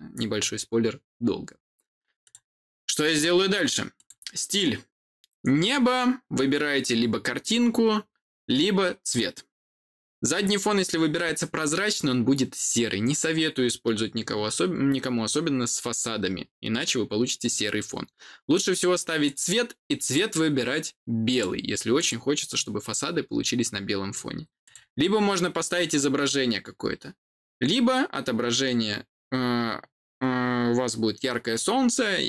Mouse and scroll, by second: 2.1 click, 3.9 click, 19.1 click, 19.9 click, 21.2 click, 21.9 click, 24.5 click.